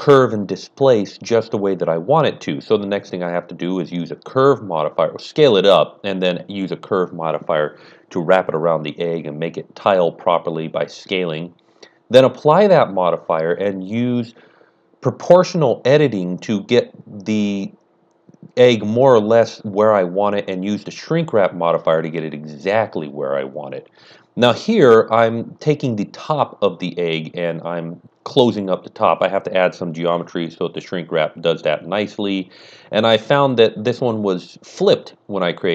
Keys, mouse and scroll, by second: 1.3 click, 2.6 click, 3.7 click, 4.5-6.4 typing, 4.9 alt+a, 5.0 scroll down 1, 5.4 click, 5.6 click, 5.7 click, 6.1 Tab, 6.4 KP_Enter, 6.5 click, 6.5 scroll down 1, 6.6 click, 7.3 middle click, 7.5 Tab, 7.8 middle click, 7.9-9.1 typing, 8.0 click, 8.5 click, 8.6-10.5 middle drag, 9.0 click, 9.5 click, 10.3 scroll down 1, 10.4-12.3 typing, 10.6 click, 10.7 scroll up 1, 10.9 Tab, 10.9 scroll down 1, 11.0 middle click, 11.2 KP_Enter, 11.7 click, 12.0 click, 12.2 Tab, 12.3 alt+a, 12.3 click, 12.6 scroll up 1, 12.7 shift+middle click, 13.3 click, 13.5-15.3 typing, 13.6 scroll down 1, 14.0 click, 14.3 scroll up 1, 14.5 click, 14.6 shift+middle click, 14.6 scroll down 1, 15.1 click, 15.3 scroll down 1, 15.7 Tab, 15.7 click, 15.8 click, 16.2 click, 16.5 click, 16.6 typing, 17.4 click, 17.6 scroll up 1, 17.7 shift+middle click, 17.7 scroll down 1, 18.1 middle click, 18.1 z, 18.4 middle click, 18.4 click, 18.9 click, 19.2 click, 19.5 KP_Decimal, 19.7 KP_Enter, 19.7 click, 19.7 KP_6, 19.8 KP_1, 19.9 click, 20.0 KP_Subtract, 20.2 KP_Enter, 20.2-22.5 middle drag, 21.4 KP_1, 22.0 scroll up 1, 22.2 Tab, 22.5 alt+click, 22.6 middle click, 23.0 scroll up 2, 23.1 alt+shift+click, 23.7 alt+shift+double click, 23.7-26.0 typing, 23.9 click, 24.6 middle click, 24.7 scroll up 1, 24.9 alt+a, 24.9 scroll down 1, 25.0 click, 25.1 right click, 25.2 click, 25.3 middle click, 25.4 right click, 25.7 click, 25.9 scroll up 1, 26.0 shift+click, 26.0 scroll down 1, 26.2 click, 26.2 shift+middle click, 26.2 scroll up 1, 26.5 scroll down 1, 26.6-26.9 scroll up 1, 26.9 alt+double click, 27.4-35.2 typing, 27.5 scroll down 1, 28.1 click, 28.2 right click, 28.3 click, 28.7 click, 28.8 KP_Enter, 28.8 ctrl+KP_Add, 29.1 middle click, 29.3 KP_Enter, 29.3 middle click, 30.0 right click, 30.2 KP_Enter, 30.2 middle click, 30.5 alt+a, 30.7 click, 30.9 click, 31.0 Tab, 31.0 middle click, 31.3 click, 31.4 Tab, 31.7 ctrl+KP_Add, 31.9 alt+a, 32.1-33.3 middle drag, 32.1 click, 32.7 alt+click, 33.1 ctrl+KP_Add, 33.3 alt+a, 33.4 click, 33.6 middle click, 34.1 click, 34.3 click, 34.5 click, 34.8 click, 35.0 Tab, 35.0 middle click, 35.0 scroll down 1, 35.4 click, 35.5 middle click, 35.6 ctrl+KP_Add, 35.6 Tab.